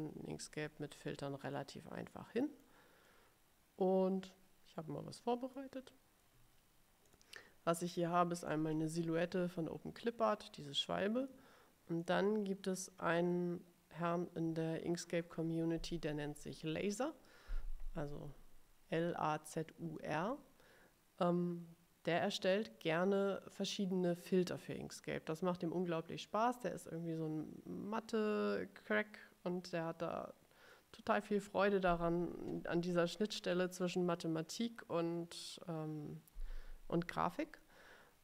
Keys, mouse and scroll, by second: 1.7 middle click, 2.4 middle click, 2.5 click, 3.1-4.7 drag, 4.7-5.8 middle drag, 7.1 click, 8.5 click, 12.1 click.